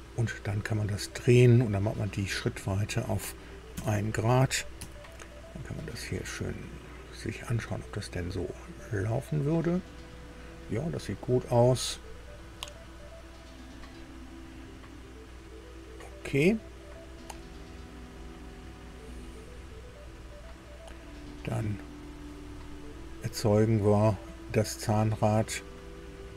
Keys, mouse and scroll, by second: 2.5 click, 3.7 KP_1, 4.8 Tab, 7.3-10.7 drag, 13.7 click, 19.6 scroll down 1.